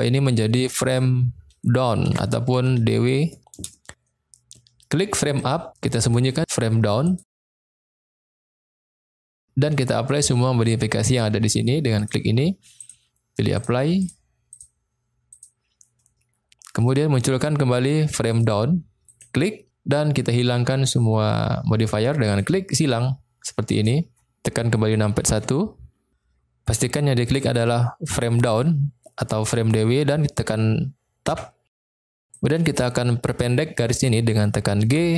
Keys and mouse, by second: 5.3 click, 7.0 click, 7.7-8.4 middle drag, 12.0-12.9 drag, 13.6-14.0 drag, 14.5-15.4 drag, 18.3 click, 19.0 click, 22.3 click, 22.9 click, 23.8 click, 25.2 KP_1, 31.3 Tab, 32.4 click, 34.8 g.